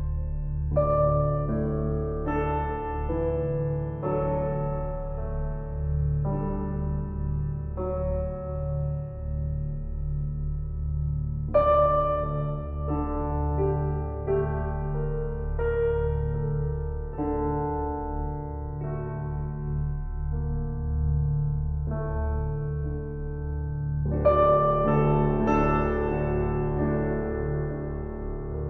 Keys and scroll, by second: 4.0 [.